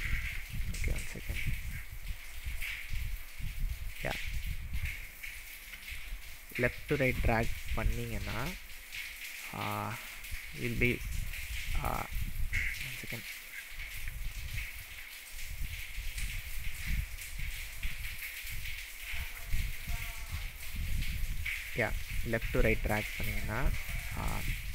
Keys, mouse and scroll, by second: 0.4-1.0 shift+middle drag, 1.2-1.5 alt+middle drag, 2.0 alt+middle drag, 2.8-3.1 alt+middle drag, 3.8-4.4 scroll up 4, 5.7 n, 6.5-7.5 scroll up 9, 7.8-8.9 shift+middle drag, 11.9 click, 12.8-13.6 scroll down 7, 13.6-14.1 shift+middle drag, 16.1 alt+middle click, 17.4-18.1 alt+middle drag, 18.4 alt+middle drag, 18.8 alt+middle drag, 19.6-20.2 shift+middle drag, 20.4-21.3 scroll up 7, 21.4-21.9 shift+middle drag.